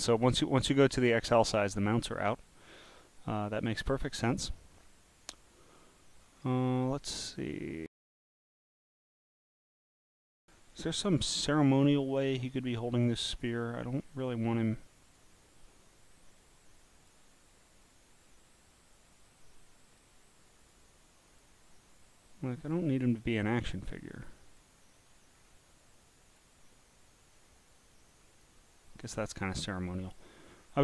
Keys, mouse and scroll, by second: 2.8 click, 4.1 scroll, 5.2 scroll, 5.8-6.4 scroll up 8, 9.9-10.8 scroll down 1, 10.8-11.3 scroll down 1, 11.8 scroll down 1, 12.3-12.9 scroll up 9, 15.0 click, 17.0 click, 17.8 click, 19.1 click, 20.6 click, 21.3 click, 22.6 click, 23.2 click, 24.2 click, 26.2 click, 28.1 click, 29.6 scroll, 29.6 scroll, 29.7 scroll, 30.5-30.8 scroll down 4.